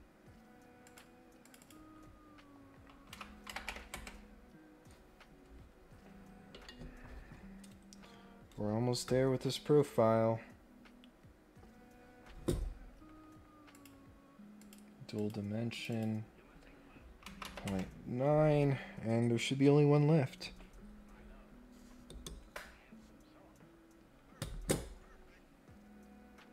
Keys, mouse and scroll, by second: 0.8 click, 1.4 click, 1.6 click, 13.7 click, 14.6 click, 15.1 click, 15.7 click.